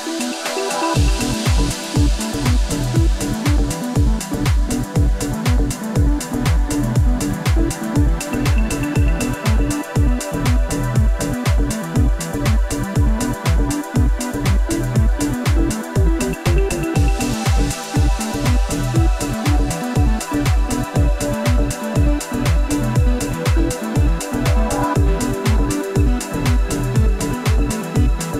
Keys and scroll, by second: 0.1 alt+F9, 4.6 F11, 7.8 shift+F11, 10.3 d, 15.5 d.